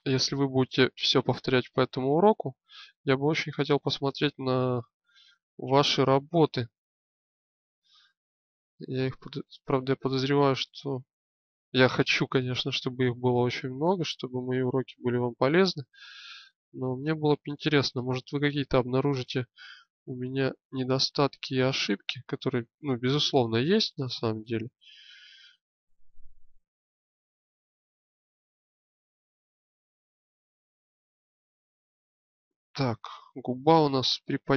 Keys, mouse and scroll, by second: 0.5-2.1 drag, 4.6 alt+click, 5.7-9.0 middle drag, 10.6-12.2 drag, 13.2-14.4 shift+middle drag, 14.8-17.5 middle drag, 17.6 middle click, 20.4-22.6 middle drag, 26.0 middle click, 26.4 click, 30.0 click.